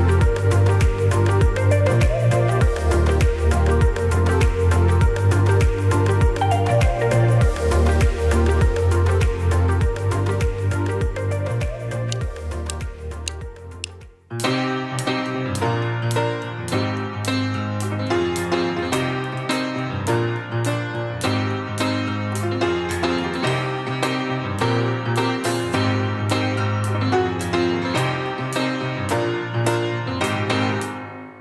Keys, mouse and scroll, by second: 0.2 right click, 0.9-5.9 drag, 7.0 ctrl+s, 9.3 alt+F9.